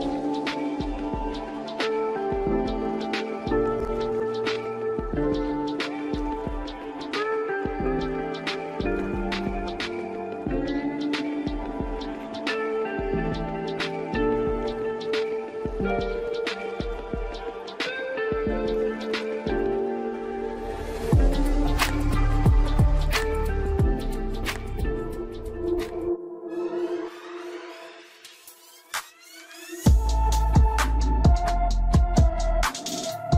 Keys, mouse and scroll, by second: 0.7-2.7 drag, 2.7-4.5 scroll down 2, 4.5-7.1 drag, 7.1-7.6 scroll up 1, 7.6-8.7 middle drag, 8.7-9.0 scroll up 2, 9.0-12.1 shift+middle drag, 12.8-13.2 scroll up 3, 13.2-17.1 middle drag, 17.1 click, 18.2-18.9 scroll down 1, 18.9 click, 19.7 click, 26.4 scroll down 3, 26.8-28.7 middle drag, 28.7-29.2 scroll up 1, 29.2-31.5 shift+middle drag, 31.5 click, 33.0-33.3 drag.